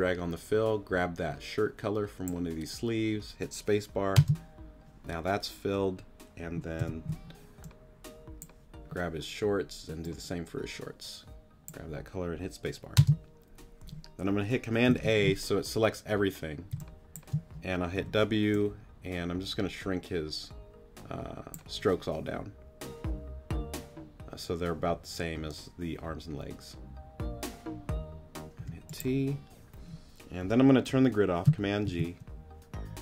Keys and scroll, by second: 4.1 space, 6.8 u, 13.0 space, 16.7 space, 18.0 w, 28.6 t, 31.9 super+g.